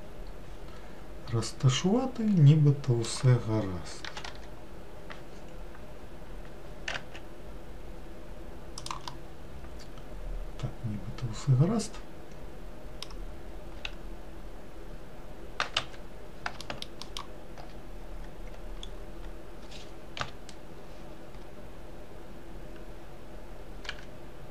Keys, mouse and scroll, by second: 4.1 g, 9.2-12.3 middle drag, 13.9 s, 16.7 alt+middle click, 18.9 scroll up 2, 20.3 KP_Decimal, 24.0 g.